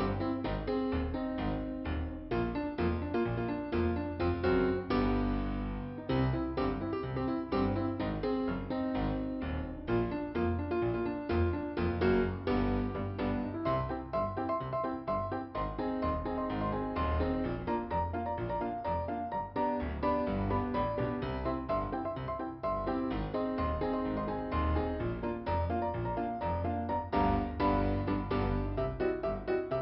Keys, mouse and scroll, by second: 0.1 click, 0.2 click, 1.5 click, 4.1 right click, 4.8 click, 6.2 click, 6.8 click, 7.0 click, 8.7 click, 9.4 click, 11.4 scroll up 2, 13.7 right click, 16.5 click, 18.0 click, 21.0 click, 22.8 click, 24.1 click, 25.5 click, 26.6 f, 27.6 middle click, 28.6 middle click.